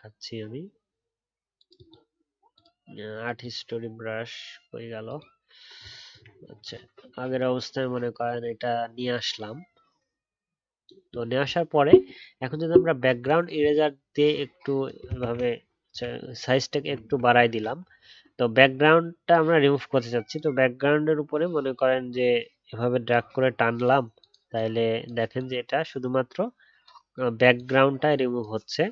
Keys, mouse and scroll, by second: 15.2 ctrl+z.